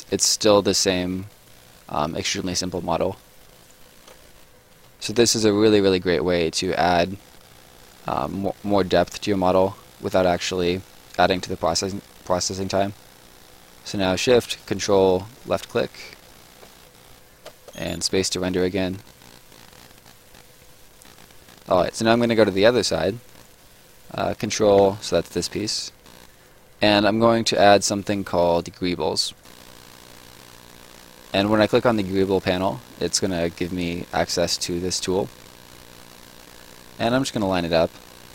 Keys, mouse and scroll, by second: 1.0 right click, 4.7 Escape, 6.5 click, 8.9 shift+click, 15.3 ctrl+shift+click, 16.6 Escape, 17.4 space, 18.4 right click, 20.9 right click, 22.8-23.2 scroll down 1, 23.2 right click, 24.3 ctrl+right click, 25.7 click, 30.5 click, 33.6 click, 37.4 click.